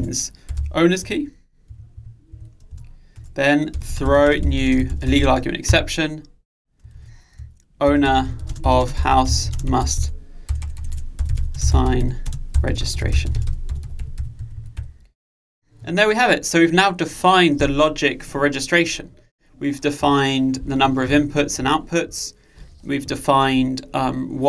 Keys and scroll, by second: 3.1 Return, 5.8 Return.